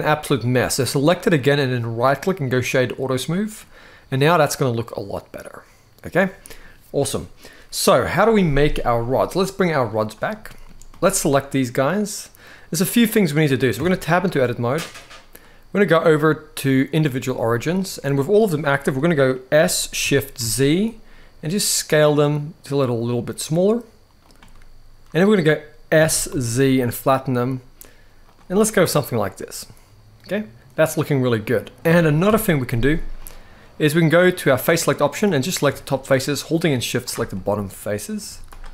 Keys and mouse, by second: 1.5-2.6 right drag, 3.5-6.3 middle drag, 9.6 click, 10.0 middle click, 11.2-12.1 middle drag, 13.4 Tab, 13.7 middle click, 15.4-16.7 drag, 17.1 middle click, 18.3 middle click, 19.3 s, 20.1 shift+z, 24.3 middle click, 25.7 s, 26.0 z, 28.0 click, 28.3-31.1 middle drag, 32.0 KP_1, 32.4 z, 34.3 click, 35.7-36.8 shift+drag, 37.0 middle click, 38.0 z.